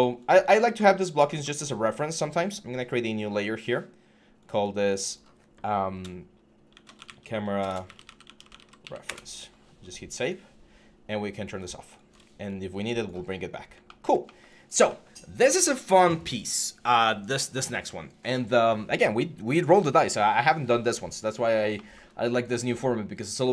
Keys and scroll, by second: 5.8-8.9 typing.